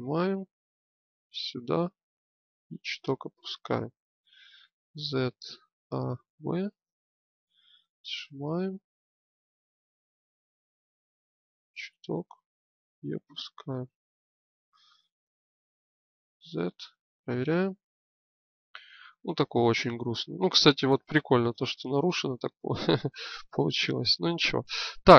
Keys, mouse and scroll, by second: 4.6 z, 5.5 a, 6.0 b, 7.7-9.0 drag, 15.0 Tab, 16.0 z, 20.7-22.7 middle drag, 22.7 click.